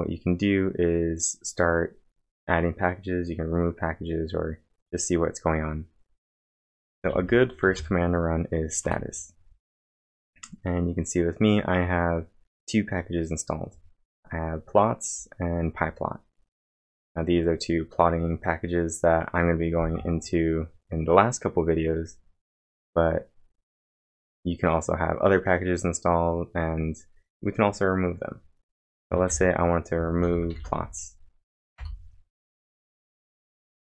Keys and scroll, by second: 6.5-8.2 typing, 8.8 Return, 28.7-31.3 typing, 31.8 Return.